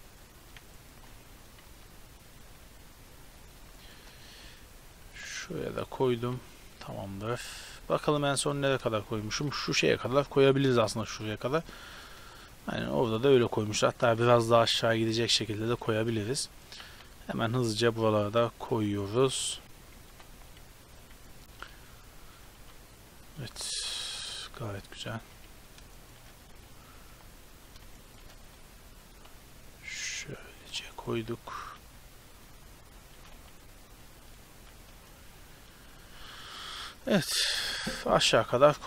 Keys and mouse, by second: 1.0 shift+d, 1.7 g, 2.7 r, 3.9-6.2 typing, 9.7 KP_7, 15.3-15.7 middle drag, 16.0 shift+d, 16.8 g, 17.5 r, 18.3 r, 19.3 shift+d, 19.7 r, 20.1 g, 20.3 r, 21.5-27.1 typing, 28.2 shift+d, 28.5 r, 29.2 g, 30.1 r, 31.1 shift+d, 33.1 shift+d, 34.6-36.8 typing, 37.1-38.8 middle drag.